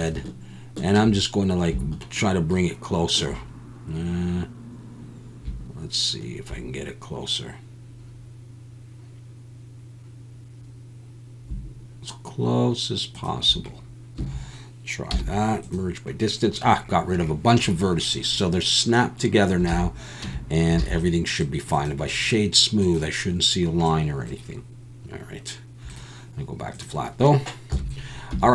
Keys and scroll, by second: 14.2 a, 15.1 m, 19.7 alt+a, 20.2 Tab, 20.8 alt+a, 27.7 KP_1, 28.3 Tab.